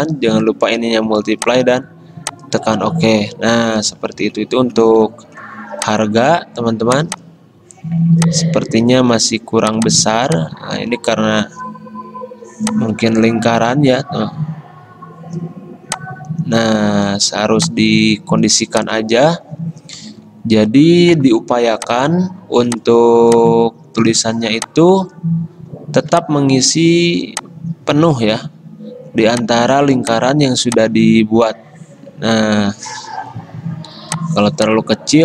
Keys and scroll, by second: 3.6 Escape, 20.1 alt+Left, 20.3 alt+Left, 20.7 alt+Left.